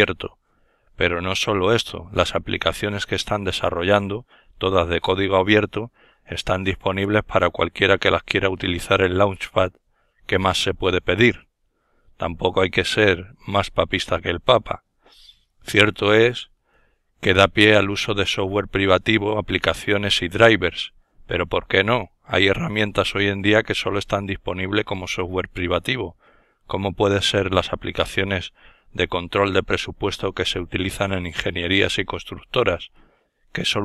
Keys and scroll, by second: 10.4 ctrl+super+Up, 17.8 super+Down, 21.9 ctrl+super+Down, 23.2 ctrl+super+Up, 24.8 ctrl+super+Down.